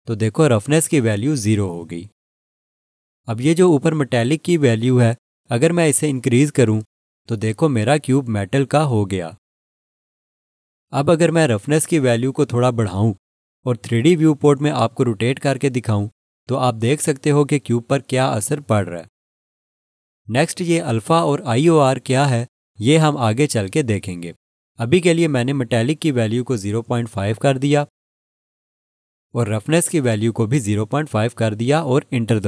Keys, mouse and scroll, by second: 6.4 click, 16.1 click, 16.3 alt+click, 18.3 click, 26.5 click, 27.6 0, 27.8 5, 28.7 Return, 30.0 click, 30.9 0, 31.2 5, 32.1 Return.